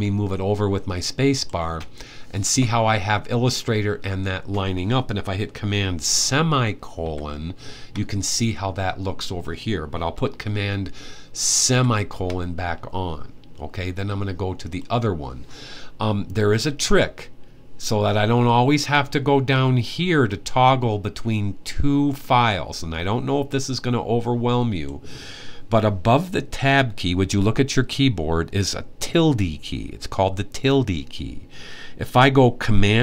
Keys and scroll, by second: 6.8 super+;, 11.4 super+;.